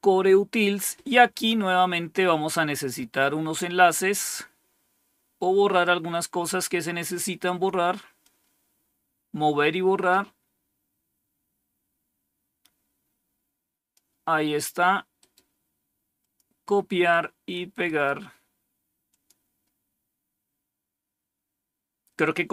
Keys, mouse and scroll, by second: 3.1-3.8 scroll down 2, 8.1-13.9 drag, 15.1 right click, 16.1 click, 17.8 right click, 19.0 click.